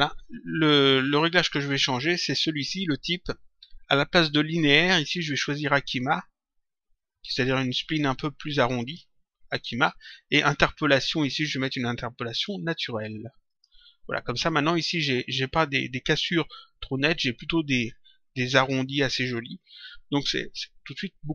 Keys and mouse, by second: 5.3 click, 8.7 click, 12.2 click, 13.4 click.